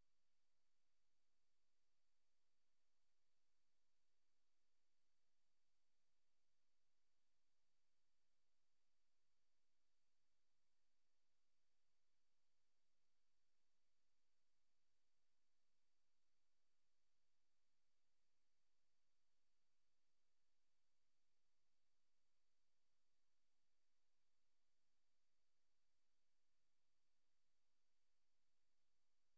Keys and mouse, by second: 4.6 click, 4.7 typing, 7.2 Return, 8.1 click, 8.8 click, 10.5 ctrl+z, 15.3-16.7 drag, 16.8 click, 17.6 click, 19.4 click, 23.1 click, 23.9 click, 25.0-25.8 drag, 27.0 ctrl+c, 27.2 ctrl+v.